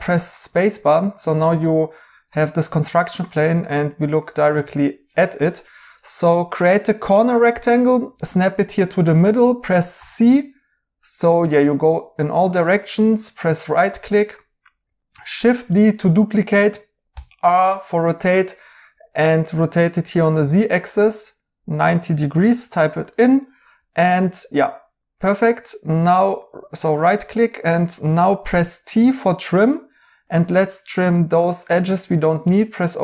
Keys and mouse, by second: 4.9 right click, 9.9 c, 13.2 right click, 15.6 d, 17.0 r, 22.0-22.9 typing, 25.0 right click, 29.1 t.